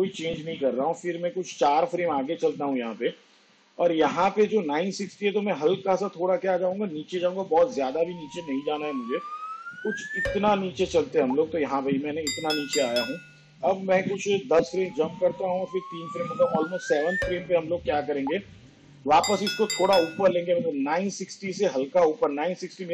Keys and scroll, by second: 1.2 ctrl+Right, 14.5 shift+Page_Down, 15.2 ctrl+Left.